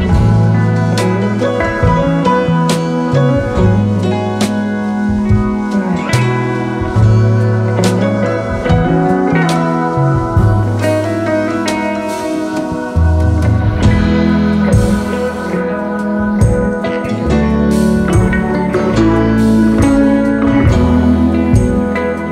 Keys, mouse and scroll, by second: 0.0-2.4 typing, 1.6-2.3 alt+scroll up 3, 3.4 double click, 3.7-4.0 alt+scroll up 1, 4.0 space, 7.2 typing, 14.6 v, 16.9 double click, 17.6 v.